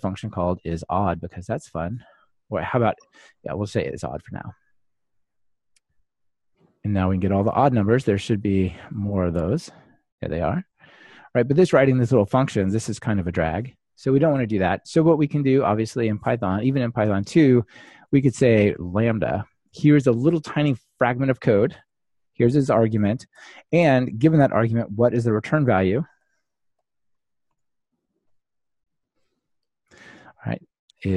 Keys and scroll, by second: 9.1 ctrl+r, 14.3 super+/, 17.1 super+/, 17.5 Return, 19.3 ctrl+alt+shift+Left.